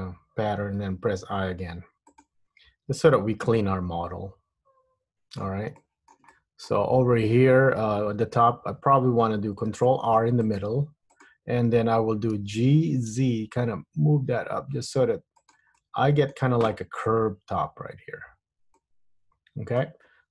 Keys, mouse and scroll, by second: 1.0 i, 2.9 Tab, 3.3 middle click, 5.9 shift+middle click, 6.5 middle click, 7.3-8.0 scroll up 1, 8.2 Tab, 9.9 ctrl+r, 12.5 g, 15.9 middle click, 17.5 Tab, 18.9 middle click.